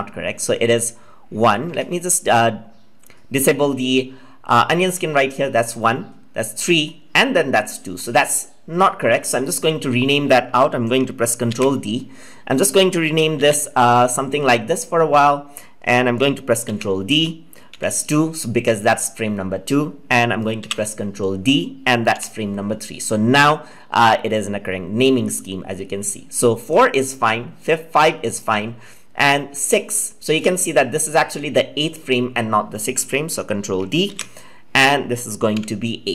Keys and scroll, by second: 11.4 ctrl+d, 16.6 ctrl+d, 34.0 ctrl+d.